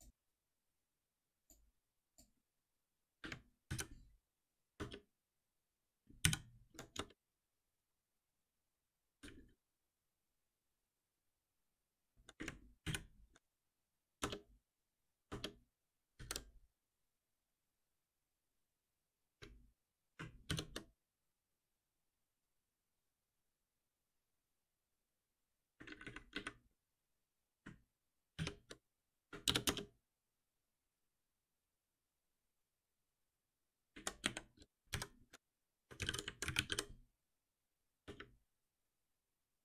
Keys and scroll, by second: 3.7 ctrl+alt+n, 6.2 ctrl+alt+p, 12.8 ctrl+alt+p, 20.5 shift+F10, 28.4 shift+F6, 34.8 Escape, 34.9 ctrl+alt+m.